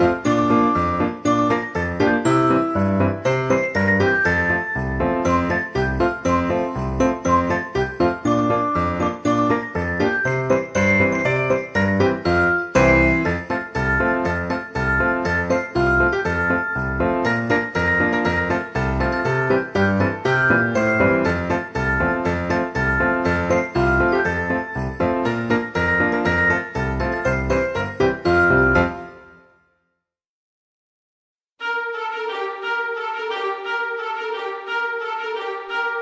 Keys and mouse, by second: 0.5 r, 2.0 click, 2.2 KP_1, 3.2 shift+d, 3.5 z, 4.3 click, 4.9 g, 5.1 z, 5.7 click, 6.3 g, 6.4 z, 6.8 click, 7.1 s, 7.6 click, 8.7 KP_7, 9.6 r, 10.9 click, 11.3 middle click, 12.7 click, 13.1 x, 13.3 click, 14.5 Tab, 15.0 shift+middle click, 15.3 middle click, 15.7 alt+z, 15.9 click, 16.5 alt+z, 16.8 s, 18.2 click, 18.9 g, 19.0 z, 19.9 click, 20.1 Tab, 21.4 KP_1, 22.0 click, 23.4 shift+middle click, 24.0 s, 24.8 click, 25.0 g, 26.9 middle click, 27.1 g, 27.7 y, 27.9 click, 28.2 s, 28.8 click, 29.2 z, 29.7 click, 30.7 shift+middle click, 31.2 shift+d, 31.9 g, 32.4 x, 33.7 click, 33.9 g, 34.1 y, 35.1 g, 35.4 x, 35.8 click.